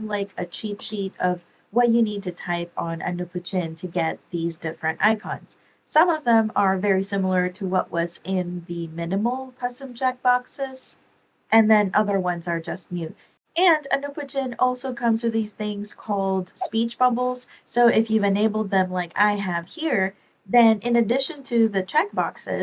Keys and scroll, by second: 0.3 Right, 0.7 typing, 1.8 Down, 3.3 Left, 3.9 Down, 19.1 Escape, 20.8 super+BackSpace, 22.0-22.6 typing.